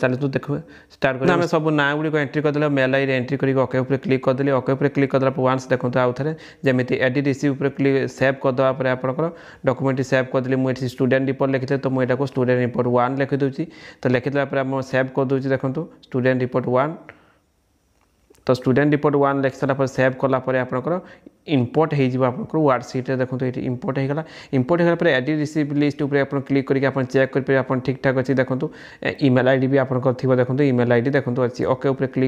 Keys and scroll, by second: 0.0 ctrl+©, 0.3 ctrl+§, 11.2 shift+z, 11.9 ctrl+®, 12.4 ctrl+_, 13.5 ctrl+®, 13.6 ctrl+z, 14.2 ctrl+shift+z, 14.7 ctrl+1, 16.8 ctrl+∞, 17.0 ctrl+®, 17.1 ctrl+z, 17.7 ctrl+shift+¬, 18.2 ctrl+ª, 18.5 ctrl+©, 19.0 ctrl+¬, 19.4 ctrl+®, 19.7 ctrl+z, 20.4 ctrl+敍.